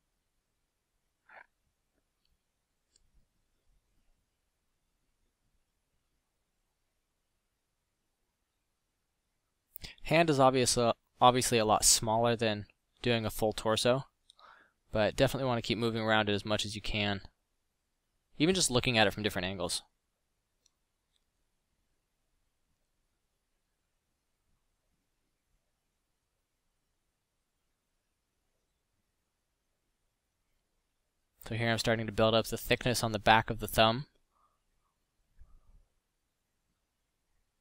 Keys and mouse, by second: 1.2 middle drag, 2.0 middle drag, 19.4 f, 23.4 f, 28.8 f.